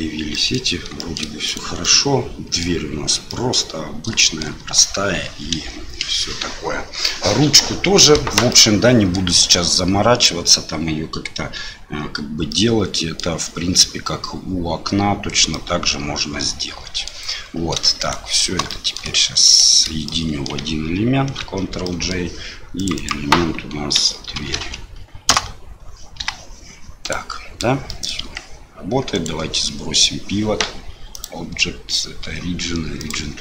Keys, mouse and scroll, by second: 0.3 middle click, 1.0 shift+middle click, 1.4 click, 1.8 middle click, 3.2 middle click, 4.2 shift+middle click, 8.5 middle click, 12.5 middle click, 15.5-17.1 middle drag, 18.0 shift+click, 18.6 middle click, 19.4 shift+click, 20.0 middle click, 21.4 ctrl+j, 21.8 click, 21.9 middle click, 22.7 click, 22.9-25.7 drag, 24.5 o, 26.2 g, 27.9 middle click, 28.2 g, 31.2-33.1 drag.